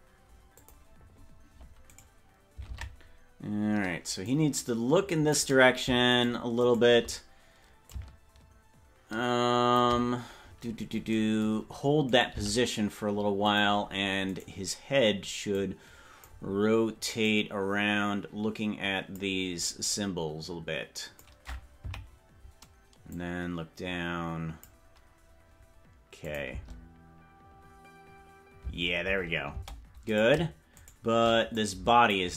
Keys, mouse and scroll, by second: 0.6 click, 2.1 right click, 2.9 ctrl+Tab, 4.3-5.5 drag, 6.4 shift+right click, 6.8 shift+right click, 7.9-9.9 shift+drag, 10.6-11.0 scroll up 8, 11.0 scroll down 1, 12.2 right click, 12.4 g, 14.4 right click, 15.6 click, 17.1-19.2 drag, 19.9-21.4 drag, 22.1 Left, 23.0-24.7 drag, 26.3 click, 26.7 space, 28.9 space, 29.1 space, 29.7 space, 30.3 right click, 31.1 shift+right click, 31.7 click.